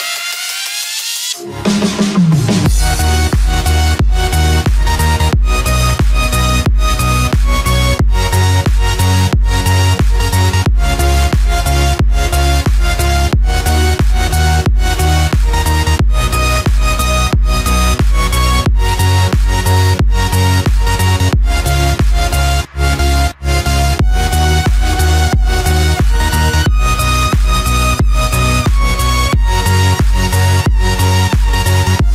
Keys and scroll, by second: 1.0 ctrl+space, 14.4 Return, 21.2 ctrl+z, 25.9 ctrl+=.